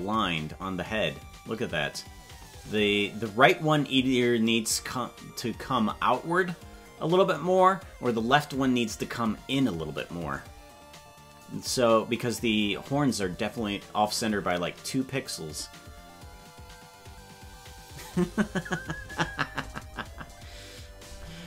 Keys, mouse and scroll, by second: 21.1 Tab.